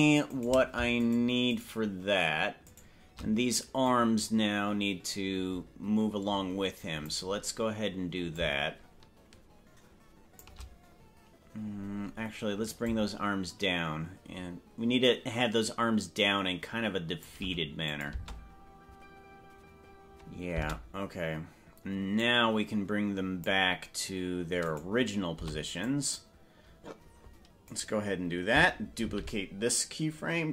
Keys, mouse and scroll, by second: 0.5 right click, 1.1 shift+right click, 2.9 right click, 3.9-7.1 drag, 8.3-10.5 shift+drag, 12.9-17.3 shift+drag, 17.9 click, 18.1 space, 20.7 space, 22.2-23.5 drag, 24.7 right click, 25.3 c, 29.2 shift+d.